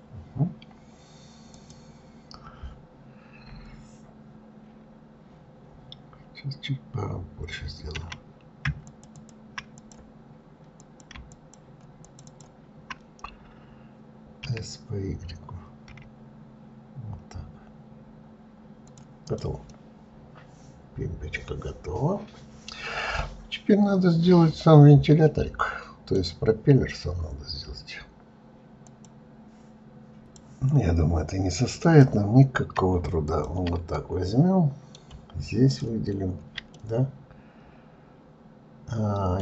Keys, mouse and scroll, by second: 1.5 click, 8.8 shift+click, 9.1 shift+click, 9.7 click, 10.7 click, 11.3 shift+click, 12.0 shift+click, 12.2 shift+click, 14.4 s, 19.2 click, 19.6-22.7 middle drag, 32.1 click, 33.5 ctrl+click, 34.2-35.9 middle drag, 35.9 ctrl+click, 37.0-39.4 middle drag.